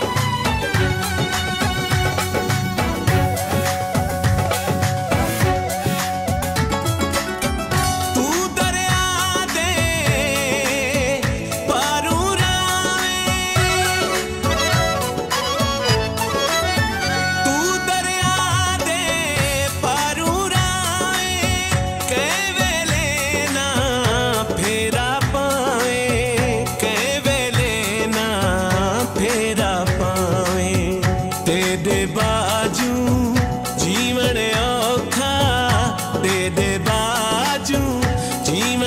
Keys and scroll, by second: 2.2 space, 3.1 l, 5.6 c, 6.9 k, 9.6 Left, 10.8 ctrl+s, 13.6 Right, 16.2 ctrl+s, 18.4 ctrl+g, 19.7 ctrl+s, 25.3 ctrl+s, 26.7 ctrl+s.